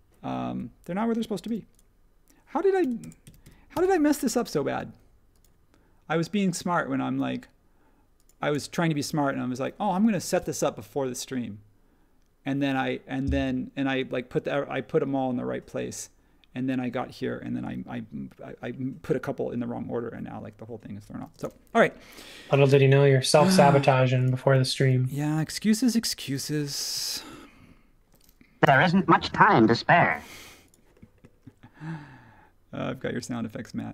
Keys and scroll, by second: 0.4 ↺, 1.4 m, 2.5-4.5 typing, 21.2 space, 28.6 m.